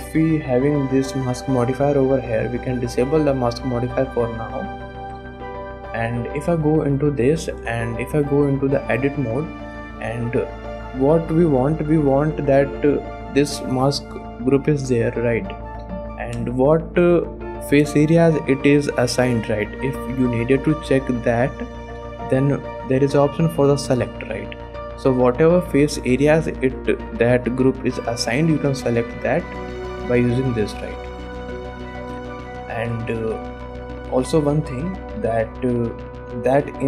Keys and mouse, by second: 2.7 click, 7.6 Tab, 8.9 alt+a, 9.5 click, 9.8 shift+click, 12.3 click, 12.6 shift+middle click, 25.0 middle click, 26.2 middle click, 32.3 click, 33.0 ctrl+Tab, 35.8 click.